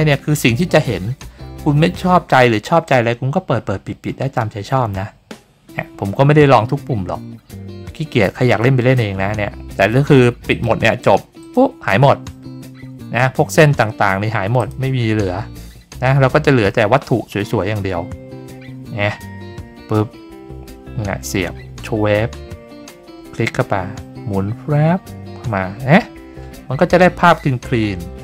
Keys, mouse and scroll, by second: 10.5 click, 11.4 click, 14.6 click.